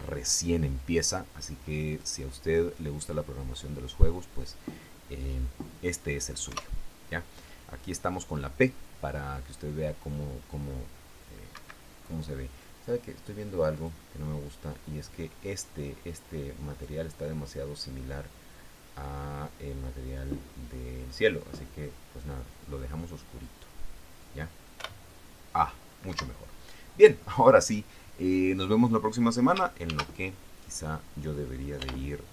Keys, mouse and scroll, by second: 6.8 p, 11.9 Escape, 14.1 click, 17.1 click, 19.2-19.7 scroll down 1, 19.7-20.3 scroll down 1, 21.7 click, 25.1 p, 26.5 Escape, 30.2 ctrl+shift+s, 32.1-32.3 typing.